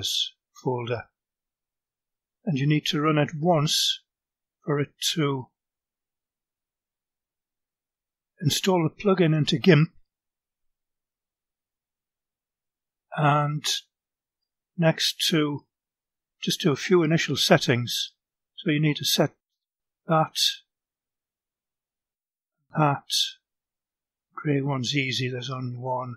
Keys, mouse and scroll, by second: 0.2-1.6 drag, 3.4 right click, 5.4 click, 13.0 click, 16.4 click, 18.4 click, 20.9 click, 22.7 click, 24.7 click, 25.5 click.